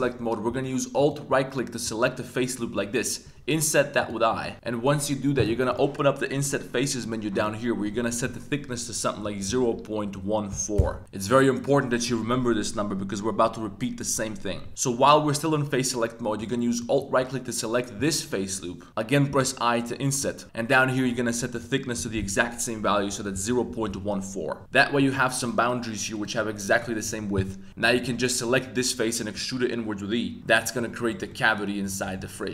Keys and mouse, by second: 0.9 alt+click, 4.0 click, 5.7 click, 7.4-10.8 drag, 16.8 alt+click, 19.3 i, 20.2 click, 21.6-23.9 drag, 24.6 3, 25.0 click, 25.4 shift+click, 26.1 shift+click, 26.7 shift+click, 27.7 w, 27.8 a, 28.0 a, 28.4 click, 29.3 e, 30.5 click, 30.7 middle drag, 31.1 z, 31.3-31.9 middle drag, 32.0 g, 32.2 y.